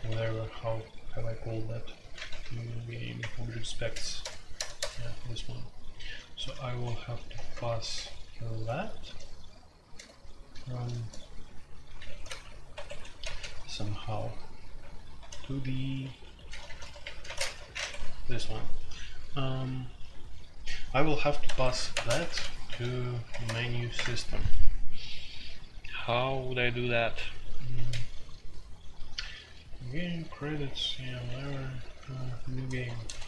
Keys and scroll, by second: 0.0-0.5 typing, 2.0-4.8 typing, 6.0-14.3 typing, 14.7 ctrl+d, 15.4-17.2 typing, 17.4 shift+Insert, 17.7 Escape, 21.4 Escape, 21.6 F2, 21.9-23.4 typing, 23.9 Return, 28.9-33.2 typing.